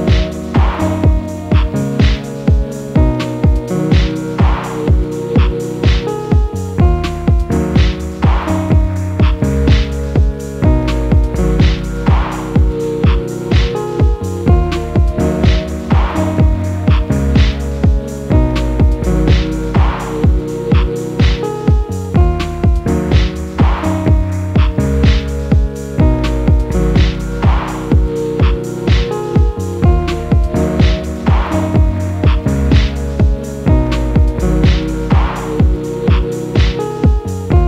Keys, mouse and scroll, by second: 0.1 ctrl+m, 9.2 ctrl+m, 13.7-14.6 typing, 18.9 typing, 23.0-23.8 typing, 25.2-26.4 typing, 28.0-30.6 typing, 31.8 typing, 33.3-37.6 typing.